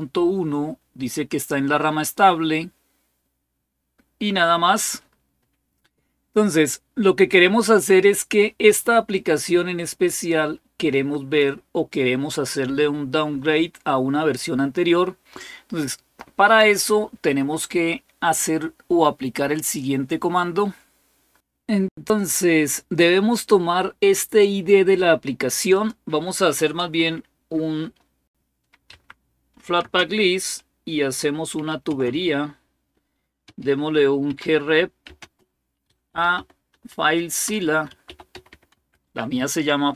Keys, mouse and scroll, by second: 8.9-11.2 drag, 19.4 click, 25.5 click, 26.6 Return, 28.7 Up, 29.6 space, 31.3-31.7 typing, 33.2-39.0 typing.